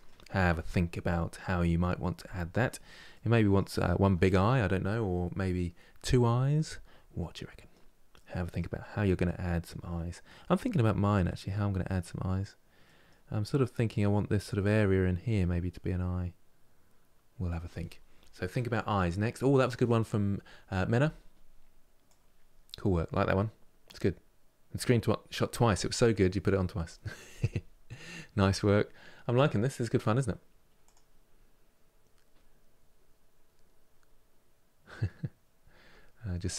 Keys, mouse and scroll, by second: 6.9-36.5 middle drag.